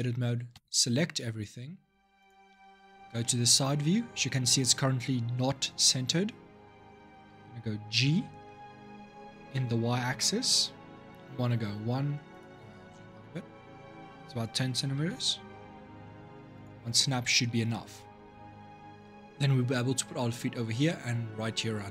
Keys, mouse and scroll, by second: 0.3 a, 2.0 click, 2.6-3.0 scroll up 3, 3.0 shift+middle click, 3.5-6.5 scroll up 1, 7.7 g, 12.5-13.6 scroll down 2, 14.6 g.